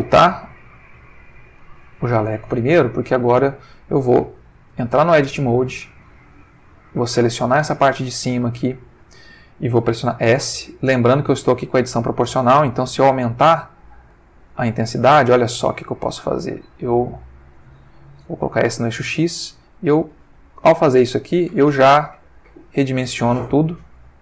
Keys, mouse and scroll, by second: 0.0 click, 1.0-1.9 drag, 5.0 Tab, 7.1-8.3 drag, 10.2 s, 11.2-11.7 scroll up 2, 11.7-12.2 scroll down 2, 12.9-13.4 scroll down 2, 13.7-14.2 scroll down 2, 15.1 scroll down 2, 15.7 scroll down 2, 16.9-17.4 scroll up 2, 18.4 x, 20.1-20.7 scroll down 2.